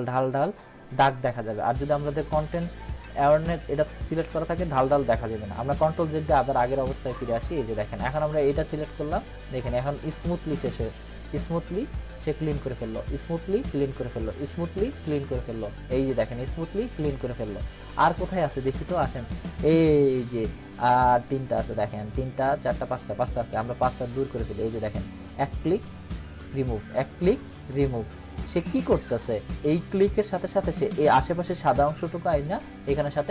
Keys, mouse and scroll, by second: 5.9 click, 6.3 ctrl+z, 8.6 click, 15.1 scroll up 1, 16.8 scroll down 1, 18.6 ctrl+-, 24.2 click, 29.9 click.